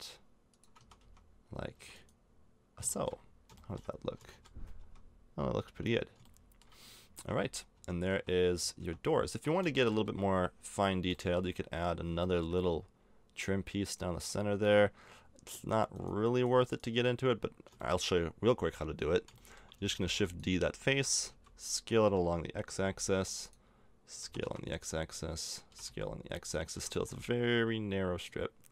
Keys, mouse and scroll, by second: 0.7 a, 1.0 Tab, 1.3 middle click, 1.7 Tab, 1.9 right click, 4.7 Tab, 5.4 Tab, 7.0-10.0 typing, 7.7 Tab, 8.7 Tab, 13.8 right click, 14.1 Tab, 17.8 middle click, 20.0 shift+d, 20.9 s, 24.2 s, 25.6 s, 26.7 s.